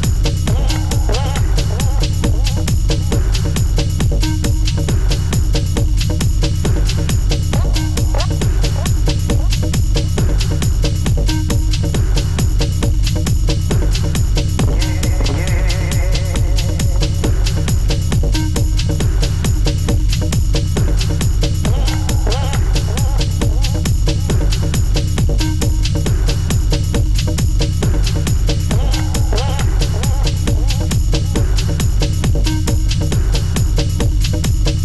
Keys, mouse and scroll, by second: 0.1-0.7 scroll up 3, 0.7-1.2 shift+middle drag, 1.2 drag, 2.1 shift+a, 3.1-4.0 scroll down 2, 4.0 e, 4.2 x, 5.5 r, 8.3 g, 9.9 `, 10.8-11.9 scroll up 6, 11.9 Tab, 13.4 1, 14.5 click, 15.2 click, 15.9 g, 17.2 click, 17.8 click, 18.4 click, 19.0 g, 20.4 click, 21.2 g, 22.6-23.2 scroll down 2, 23.2 click, 23.5 g, 26.7 click, 27.0 g, 29.2 click, 29.5 g, 31.6 shift+middle click, 32.0-32.6 scroll up 3, 32.6 click, 33.4 click, 33.7 click, 34.3 g.